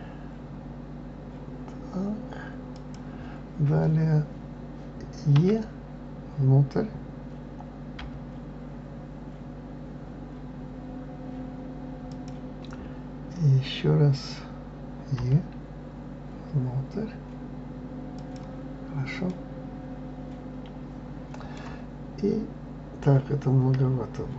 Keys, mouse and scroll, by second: 19.3-22.3 middle drag.